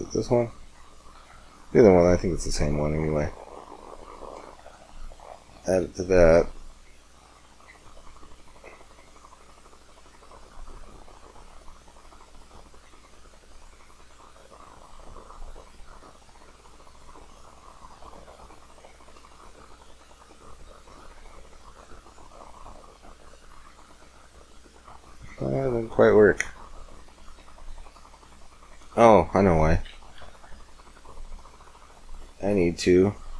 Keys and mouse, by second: 6.2 shift+z, 23.9 middle click, 25.4 middle click, 25.7-27.0 middle drag, 29.9 KP_7, 30.8 KP_5, 33.0 Tab.